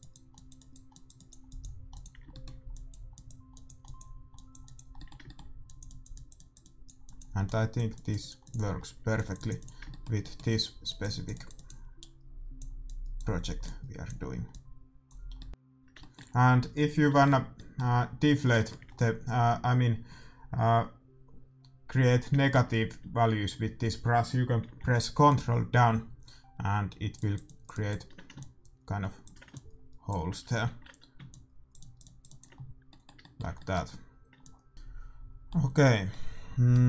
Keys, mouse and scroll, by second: 2.2-7.0 middle drag, 9.8 middle click, 10.0-12.0 middle drag, 15.3 middle click, 15.6-25.2 middle drag, 25.2-34.0 drag, 30.6 ctrl+z, 32.5-36.8 middle drag, 34.3 click.